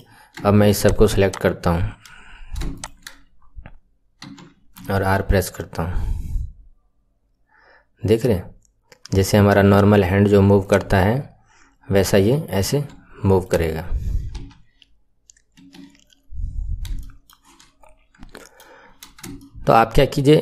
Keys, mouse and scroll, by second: 0.7 shift+click, 1.2 shift+click, 2.7 shift+click, 4.2 KP_1, 4.8 r, 10.8 scroll down 2, 11.6-12.2 scroll up 8, 12.2-12.7 middle drag, 12.7 KP_1, 13.3 click, 13.7 scroll down 2, 14.4 r, 16.9-19.3 shift+middle drag, 19.3-20.4 right drag.